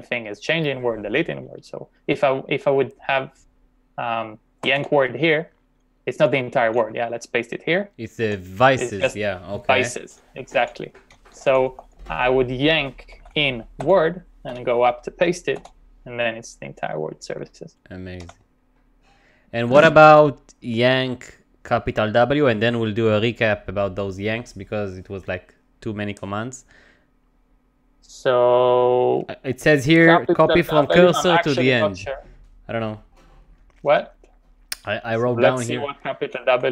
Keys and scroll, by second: 0.0-0.1 typing, 4.4-5.3 typing, 6.7-11.7 typing, 12.9-15.6 typing, 18.2 u, 20.3 j, 30.0 shift+y, 34.8-36.7 typing.